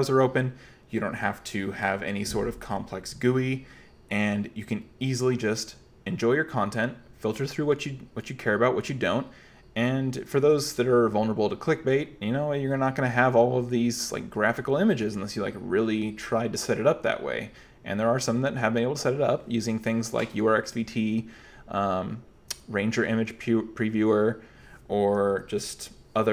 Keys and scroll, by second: 25.3 q.